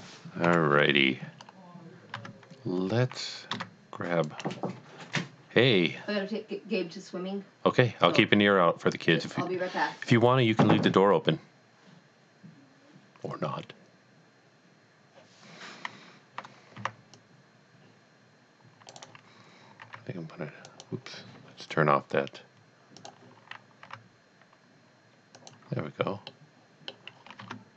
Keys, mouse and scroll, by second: 0.5 KP_3, 1.4-1.7 scroll up 1, 2.2 Tab, 3.6 c, 4.3 right click, 16.7 right click, 17.2 click, 18.9 right click, 19.8 r, 20.7 right click, 23.0 click, 23.9 r, 25.4 click, 26.3 middle click, 27.2-27.5 scroll down 1, 27.5 Tab.